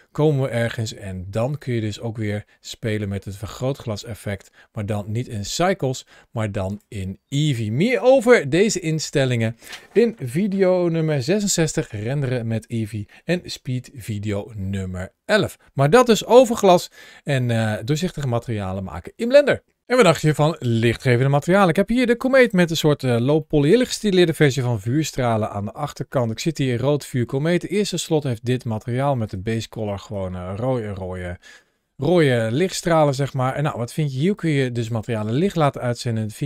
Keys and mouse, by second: 0.4 click, 1.3 click, 2.1-3.8 drag, 4.3 g, 6.5 click, 15.8 g, 16.5 click, 17.6-18.6 middle drag, 21.9 g, 23.2 shift+middle click, 23.6-25.8 middle drag, 29.0 click, 32.5 click, 34.0 click.